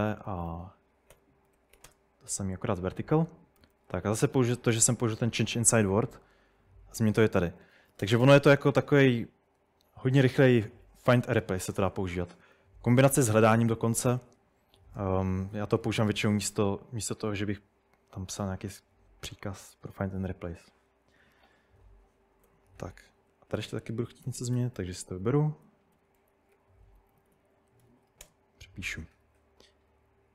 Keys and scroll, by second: 0.0-5.7 typing, 7.4-8.0 typing, 13.1-16.4 typing, 19.6 typing, 22.5-28.4 typing.